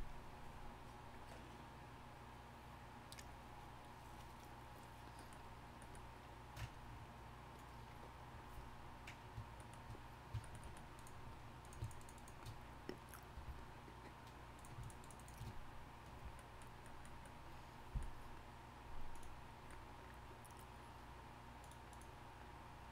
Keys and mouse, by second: 5.1-6.6 middle drag, 13.3 f, 16.1 f.